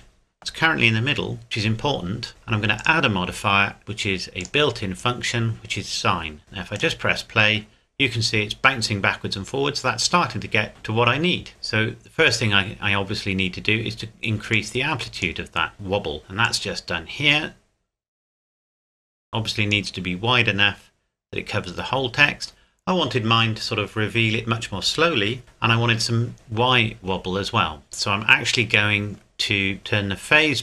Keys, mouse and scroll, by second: 2.8 click, 4.4 click, 6.8 click, 11.6-13.3 scroll down 2, 13.3 scroll down 1, 14.5 click, 16.4 click, 29.8 click.